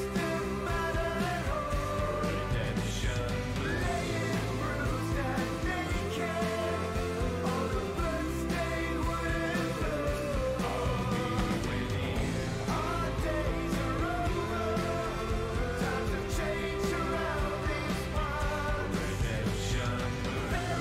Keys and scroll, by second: 1.1 ctrl+z, 1.4 ctrl+z, 2.3 s, 3.8 s, 4.9 s, 9.3 d, 19.3 ctrl+z, 19.5 ctrl+z, 20.7 b.